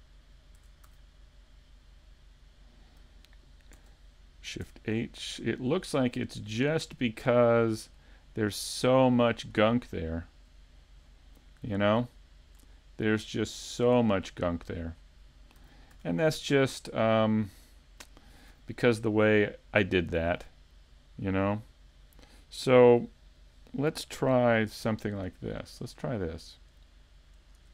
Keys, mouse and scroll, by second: 0.6 Tab, 2.1 right click, 4.7 Tab, 5.0 scroll up 3, 5.4 middle click, 8.0 shift+middle click, 8.5-8.9 scroll up 2, 9.0 shift+middle click, 9.5-10.1 scroll up 1, 10.1 shift+middle click, 10.1 scroll up 1, 11.1 scroll down 2, 11.4 middle click, 12.2 shift+middle click, 12.8 scroll down 1, 13.2 middle click, 13.7 scroll down 2, 14.0 shift+middle click, 14.5 middle click, 15.6 a, 15.9 a, 16.5 scroll down 2, 17.4 scroll down 1, 20.8 scroll down 1.